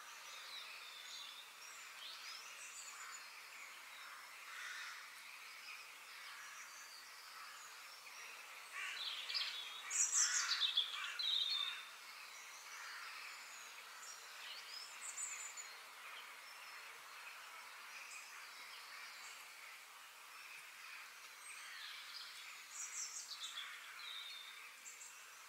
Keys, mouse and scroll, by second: 10.3 middle click, 11.0 scroll down 2, 13.5-14.7 middle drag, 14.7 scroll down 2, 16.5 middle click, 17.3-18.0 scroll up 3, 18.0 shift+middle click, 18.5-20.0 scroll down 3, 20.0 middle click, 20.3-20.7 scroll down 2, 20.7 middle click, 20.8 ctrl+z, 22.7 f, 23.2-25.2 middle drag.